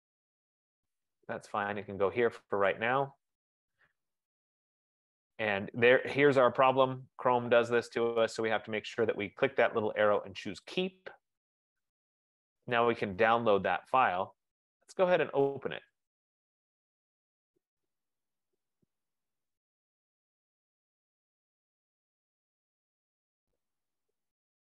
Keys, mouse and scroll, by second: 3.6 click, 4.4 F15, 8.6 click, 11.5 click, 15.0 click, 16.2 click.